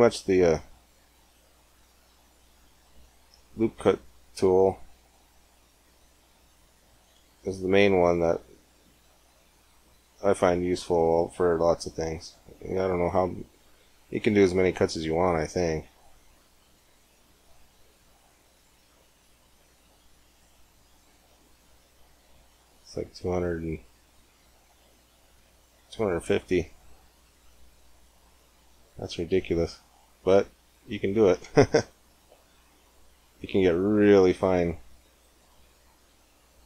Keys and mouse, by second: 1.4 shift+a, 3.6 Tab, 4.2 ctrl+r, 28.2-29.4 middle drag, 29.4 click, 29.6 middle click, 29.7 click, 30.5 click, 30.8 middle click, 31.1 click, 31.6 click, 32.7 click, 32.9 click, 32.9-34.4 middle drag, 35.0-36.6 right drag.